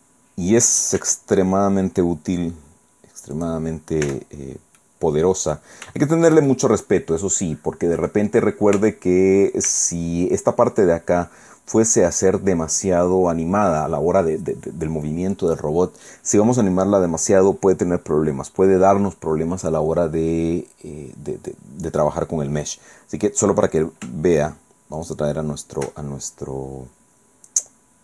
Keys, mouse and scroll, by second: 0.9 e, 3.3 click, 4.1 Tab, 4.3-4.8 scroll down 2, 4.8 click, 6.0-8.3 shift+drag, 8.7 Tab, 9.7 Tab, 11.8-12.5 scroll down 2, 13.7 scroll down 2, 17.3-17.6 scroll down 2, 19.3-19.7 scroll up 2, 19.8-20.1 scroll down 2, 20.8-21.1 scroll down 2, 25.0 shift+click.